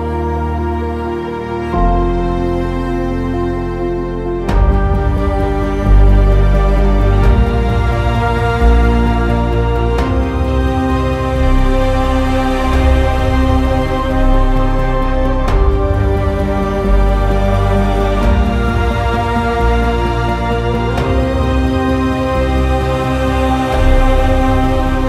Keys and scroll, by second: 8.2 Escape, 9.4 q, 11.9 w, 12.8 ctrl+z.